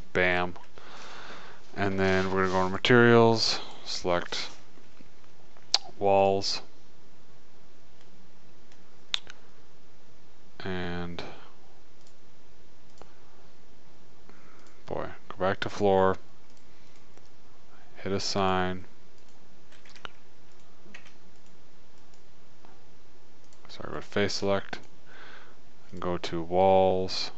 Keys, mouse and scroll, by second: 0.6 middle click, 2.4 middle click, 6.5-8.5 middle drag, 11.6 middle click, 12.6 click, 14.1 click, 16.8 click, 17.2-18.6 middle drag, 18.6 click, 18.7 middle click, 18.9 click, 19.5-20.5 middle drag, 20.3 Tab, 20.5-24.8 drag, 21.3 Tab, 23.9 right click, 24.4 right click, 25.7 click, 27.1 click.